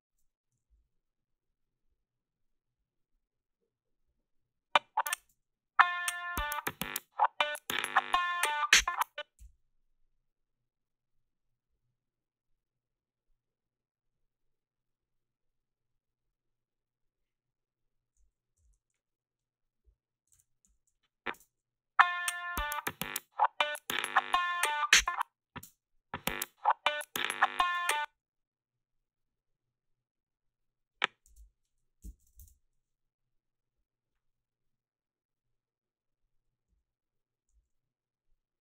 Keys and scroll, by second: 0.7 a, 5.2 space, 8.8 space, 9.4 f, 20.6 ctrl+r, 21.3 space, 24.9 space, 25.7 space, 27.8 space, 28.0 a, 31.3 alt+shift+s, 31.8-32.8 typing, 36.7 s, 37.5 a.